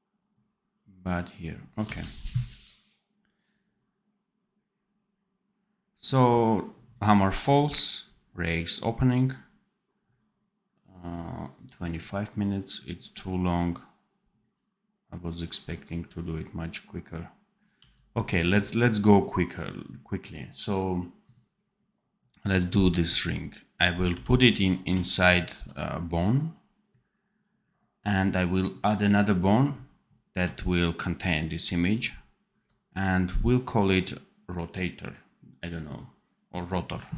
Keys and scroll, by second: 1.7 d, 17.7 d, 24.0 n.